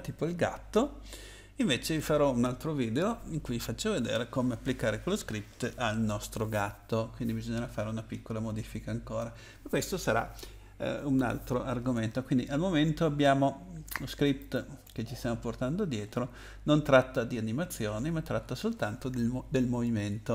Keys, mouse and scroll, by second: 14.4 click, 15.5-16.1 scroll down 3, 18.0-20.0 scroll up 3, 20.0-20.3 scroll down 2.